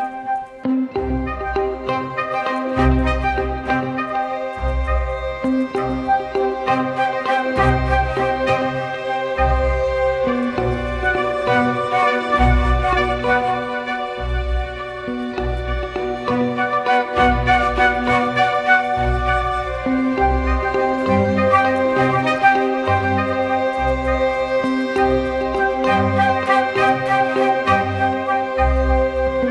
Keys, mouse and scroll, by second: 6.3 double click, 23.4 double click, 28.4 space.